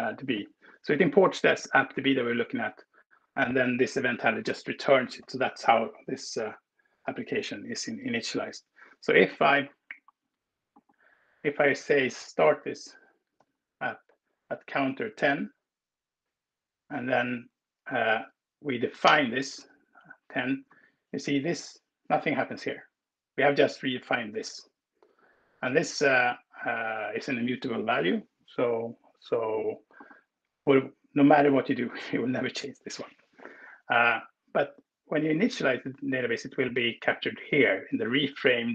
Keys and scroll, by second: 12.3-13.6 typing, 18.9 alt+Return.